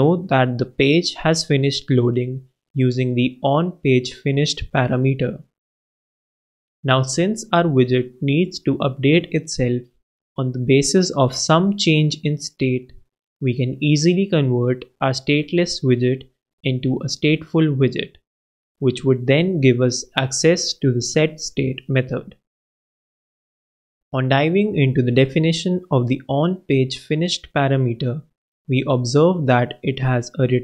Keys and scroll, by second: 0.2 super+space, 9.7 alt+Return, 20.4 alt+Return, 24.9 shift+super+Right, 25.7 shift+super+x, 26.5 super+x.